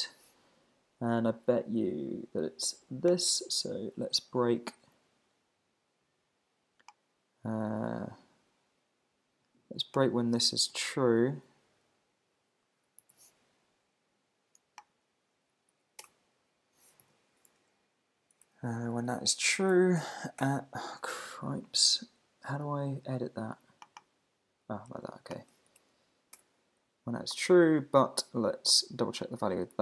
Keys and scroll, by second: 10.4 Right, 10.9 alt+shift+Left, 13.0 super+c, 15.4 Down, 16.0 Return, 17.0 super+v, 18.5 alt+Left, 19.0 Left, 19.7 Right, 20.4 Return, 26.4 Return.